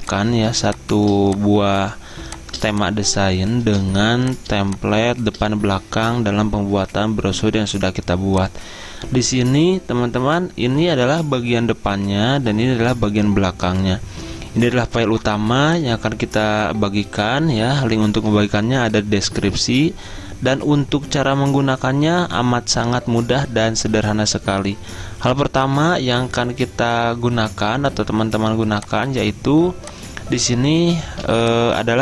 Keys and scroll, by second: 1.1 o, 2.2 space, 5.1 v, 31.1 z.